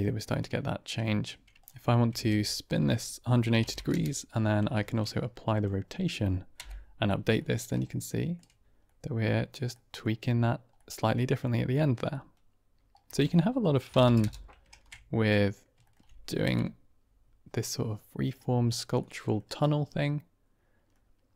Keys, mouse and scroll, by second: 0.2 middle click, 0.9 shift+middle click, 1.5 Tab, 1.5 ctrl+space, 1.5 click, 2.0 r, 2.1 z, 3.4 KP_1, 3.5 KP_8, 3.6 KP_0, 3.8 KP_Enter, 4.7 ctrl+a, 6.5 Right, 7.3 middle drag, 7.8-8.2 shift+middle drag, 8.8 middle click, 9.8 middle click, 10.6-11.2 middle drag, 12.0 middle drag, 13.0-13.9 typing, 14.1 KP_Enter, 14.6 ctrl+a, 15.7 shift+click, 16.4 Right, 17.4-18.2 middle drag, 18.9-19.3 middle drag, 19.5-20.9 middle drag.